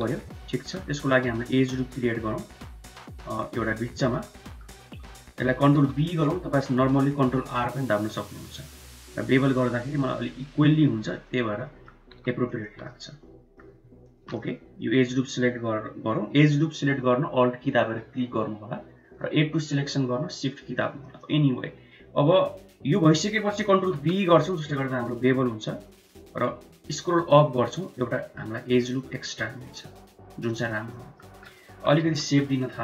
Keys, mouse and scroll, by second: 0.4 middle click, 0.9 shift+middle click, 1.6 ctrl+r, 4.2 click, 5.5 ctrl+b, 11.4 click, 11.4 right click, 11.9 2, 12.4 alt+click, 12.7 middle click, 14.2-19.0 middle drag, 19.4-20.7 middle drag, 20.9-23.2 middle drag, 23.7 ctrl+b, 30.7 click, 30.7 right click, 31.5 KP_1, 31.8 KP_3.